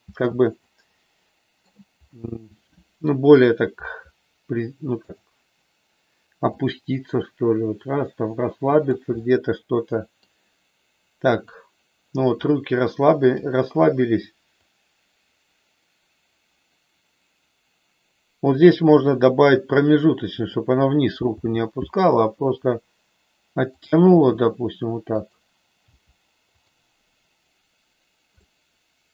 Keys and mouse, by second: 0.6-1.7 middle drag, 5.1 click, 6.5-8.9 drag, 9.1-10.2 middle drag, 11.3 click, 13.3 click, 14.7-18.9 drag, 21.3 g, 24.1 r, 25.9 g, 26.6 click, 28.5-29.1 middle drag.